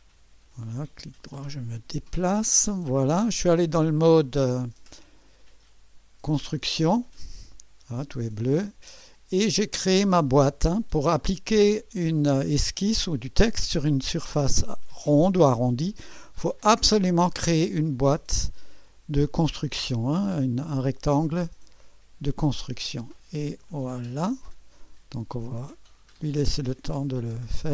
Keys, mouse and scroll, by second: 0.7-2.8 right drag, 5.0 click, 9.9 click, 16.5-24.0 drag.